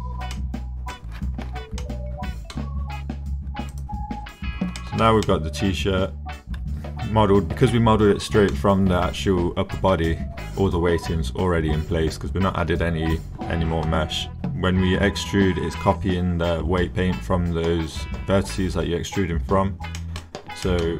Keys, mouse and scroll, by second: 0.3 click, 1.4 Tab, 1.8-2.5 drag, 4.8 shift+middle drag, 5.2-5.7 drag, 5.7 middle click, 5.7-8.5 drag, 20.0 drag, 20.7 click.